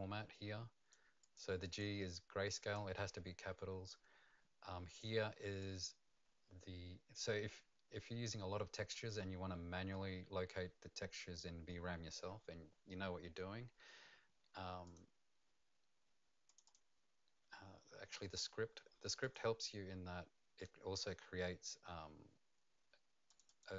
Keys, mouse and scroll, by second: 1.8 click, 5.6 click, 8.9 click, 14.8 click, 16.4 click, 19.2 click, 19.6-22.1 scroll down 4, 22.1 scroll up 2, 23.4 click.